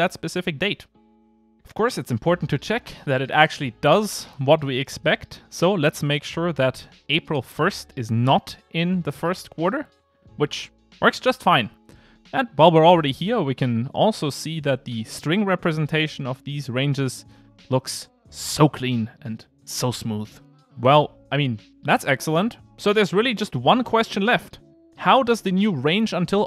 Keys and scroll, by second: 6.8 ctrl+r.